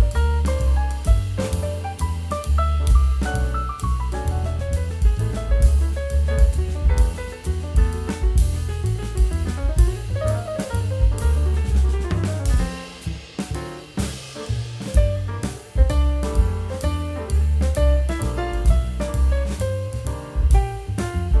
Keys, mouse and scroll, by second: 1.0 middle click, 2.3 c, 3.2 shift+f, 3.9 middle click, 4.9 shift+f, 5.1 t, 5.9 middle click, 5.9 a, 6.6 g, 7.6-8.8 scroll down 1, 8.9 middle click, 12.5 scroll down 1, 12.8 middle click, 13.2 t, 13.4 z, 13.9 middle click, 14.1-14.8 scroll up 1, 16.2-16.7 scroll down 1, 18.3-20.1 scroll down 1, 20.4-21.4 scroll down 1.